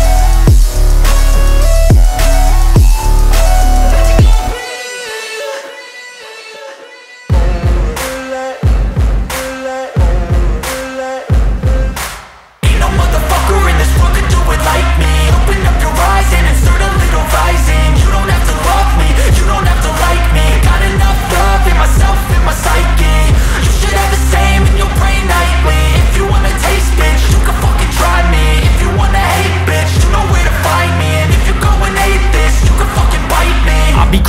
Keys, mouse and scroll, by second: 5.7 ctrl+super+z, 8.6 ctrl+super+z, 13.2 ctrl+super+z, 15.3 ctrl+super+z, 19.3 ctrl+super+z, 21.5 ctrl+super+z, 22.3 ctrl+super+z, 23.5 ctrl+super+z, 28.1 ctrl+super+z, 32.5 ctrl+super+z.